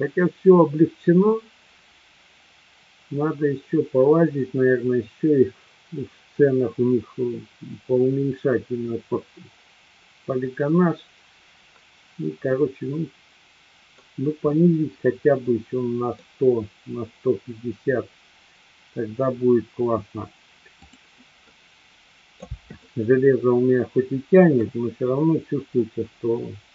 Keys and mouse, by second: 12.6-14.0 middle drag, 14.5-16.4 middle drag, 20.8 click, 21.5-22.5 middle drag, 22.8-24.7 shift+middle drag, 26.0-26.7 middle drag.